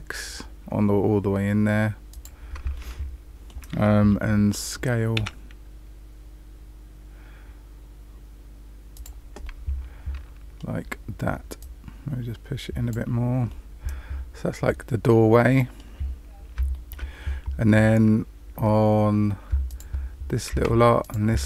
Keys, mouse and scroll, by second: 2.7 middle click, 5.1 s, 9.4 middle click, 11.5 click, 12.8 click, 13.4 middle click, 16.1-16.5 scroll down 1, 16.7 shift+middle click, 17.2 scroll up 1, 19.6 alt+click, 21.0 alt+shift+click.